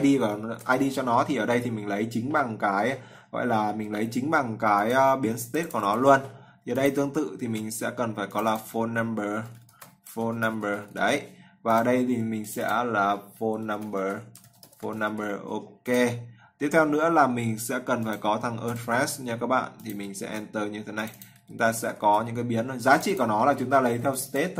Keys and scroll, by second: 0.2 ctrl+s, 7.2 ctrl+v, 20.1 ctrl+v.